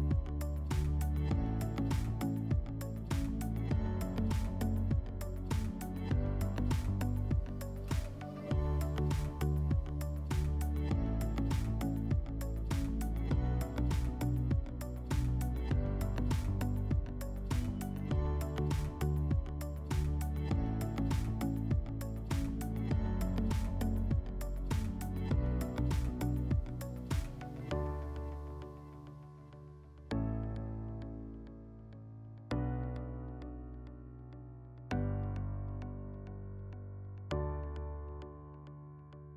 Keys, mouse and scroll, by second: 0.4 click, 2.4 click, 3.8 click, 6.1 scroll, 6.1-8.1 drag, 10.6 click, 12.1 click, 12.8 click, 14.7 click, 16.5 click, 22.2 middle click, 24.2 scroll.